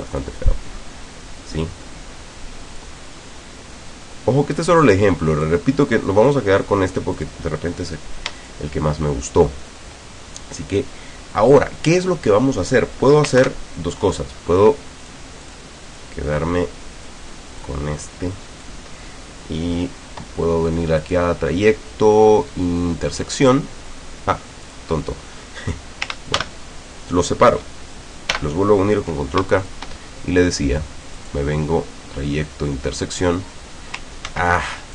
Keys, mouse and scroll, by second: 0.2-3.0 drag, 3.2-3.8 scroll up 2, 4.9 click, 6.3 click, 7.2 click, 8.4 shift+click, 13.4 ctrl+KP_Divide, 15.0 click, 15.5 click, 16.0-17.3 drag, 17.6-18.9 drag, 21.0 click, 23.2 click, 24.7 click, 26.4 ctrl+shift+g, 28.4 ctrl+k, 29.7 shift+click, 31.2 click, 33.0 click, 34.3 ctrl+z.